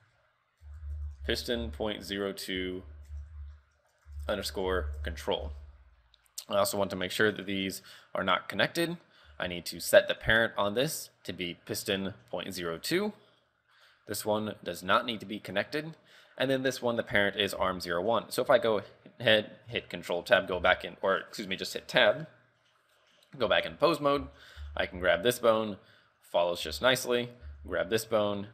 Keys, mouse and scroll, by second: 0.0 click, 6.4 right click, 7.5-7.8 scroll down 4, 9.3 Tab, 10.2 click, 13.8 right click, 15.1 click, 16.2 right click, 18.0 Tab, 18.3 scroll down 5, 18.9-19.2 scroll up 4, 20.6 z, 24.0 right click, 24.3 z, 24.6 z, 25.1 r, 26.7 z, 26.8 scroll down 2, 27.2 right click, 27.5 z, 27.7 r.